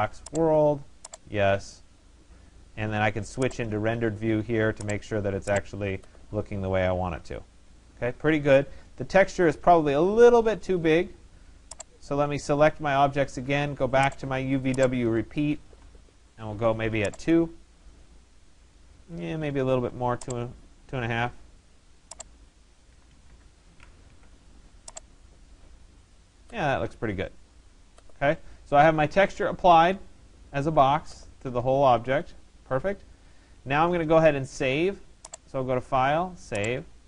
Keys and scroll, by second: 15.2 2, 16.1 Tab, 22.5 2, 23.1 Delete, 23.3 5, 24.1 Tab.